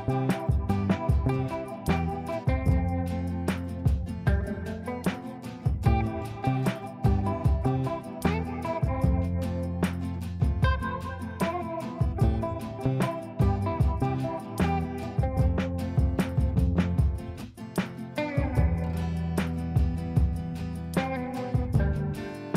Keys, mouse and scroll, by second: 4.6 ctrl+u, 5.0 click, 9.5 space, 10.5 ctrl+r, 11.7 click, 14.1 ctrl+r, 14.8 click, 18.1 F3, 18.4 F2, 18.6-22.5 drag.